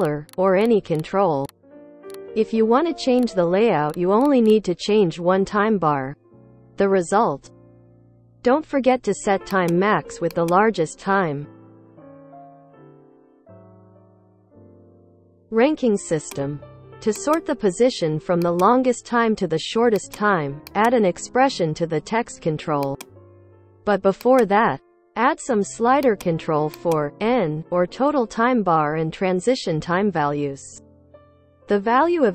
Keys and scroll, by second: 2.4 Return, 2.7-3.5 typing, 4.6 space, 10.8 8, 11.5 Return, 12.2 space, 16.2 ctrl+c, 28.4 Return, 28.6 n, 29.0 ctrl+d, 29.4 Return, 29.9-31.2 typing, 31.2 Return.